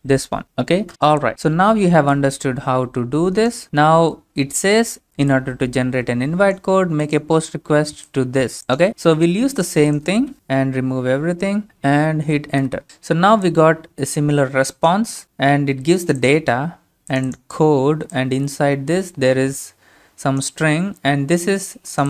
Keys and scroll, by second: 0.9 Return, 10.3 Up, 10.3 BackSpace, 10.6 BackSpace, 10.8-11.1 BackSpace, 12.7 Return.